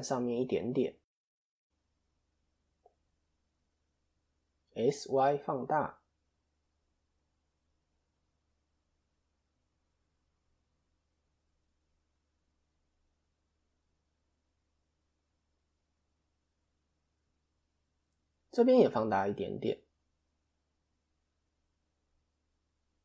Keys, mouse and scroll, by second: 2.2 click, 4.3 o, 17.1-17.8 scroll up 1, 17.9 click, 17.9-18.4 scroll up 1, 19.4 o, 20.6 s.